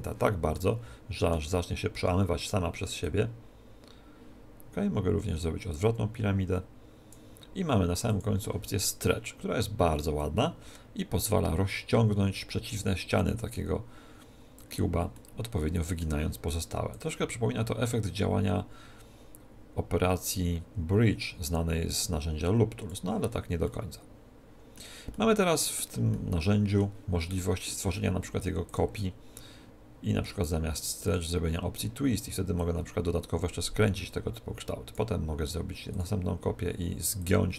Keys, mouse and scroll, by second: 0.5-2.4 middle drag, 3.0 click, 8.1-12.1 drag, 15.1-16.9 middle drag, 16.9 click, 23.7-28.1 middle drag, 28.7 click, 31.1-34.6 drag, 35.9-37.5 drag.